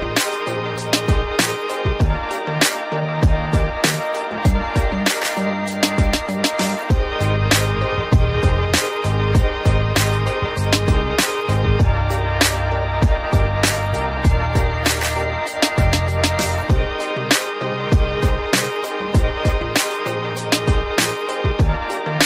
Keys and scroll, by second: 2.3 Return, 3.3 Up, 5.3 ctrl+t, 8.5 Up, 11.4 Return, 13.4 Right, 16.0 Down, 17.0 ctrl+0.